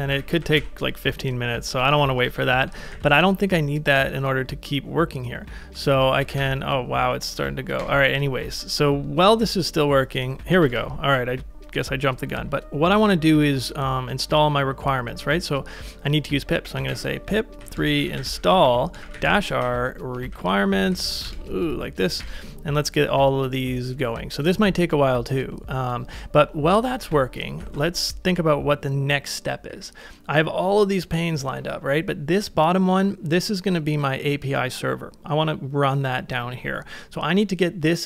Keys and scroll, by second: 0.5 ctrl+a, 0.6 ctrl+', 1.9 ctrl+a, 2.4 ctrl+a, 2.4 ctrl+k, 2.8 ctrl+a, 2.9 ctrl+j, 5.9 ctrl+r, 7.8 Return, 10.7 ctrl+a, 10.7 k, 16.4-21.0 typing, 21.3 Tab, 22.2 Return, 27.6 ctrl+a, 29.7 j.